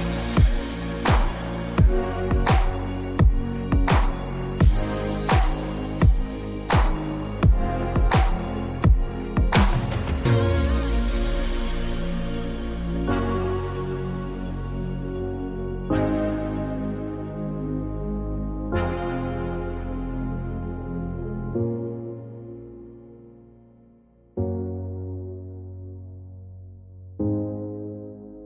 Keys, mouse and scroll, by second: 0.3 alt+scroll down 1, 0.9 alt+scroll up 1, 2.4 scroll up 1, 3.2 scroll down 1, 5.7-6.2 scroll down 1, 6.5-10.0 drag, 28.3 ctrl+Num_Lock.